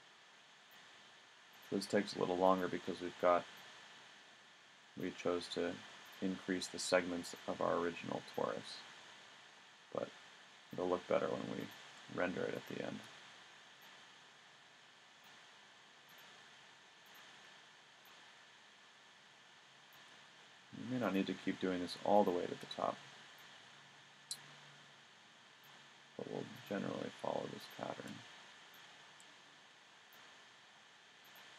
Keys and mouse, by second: 0.6 click, 5.6 middle click, 9.0-10.1 drag, 10.1 right click, 16.1 middle click, 18.1 middle click, 19.9-21.2 middle drag, 29.3 middle click, 30.8 middle click.